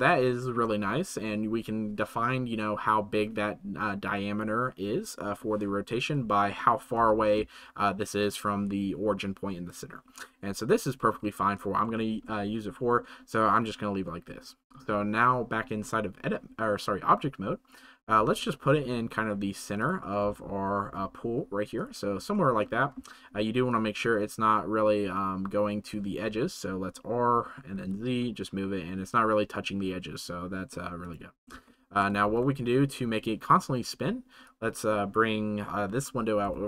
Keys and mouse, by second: 0.2 shift+middle drag, 12.0 click, 19.7 click, 21.7 click, 22.4 shift+click, 23.6-25.9 drag, 26.2 r, 31.6-31.9 shift+drag, 34.4 middle click.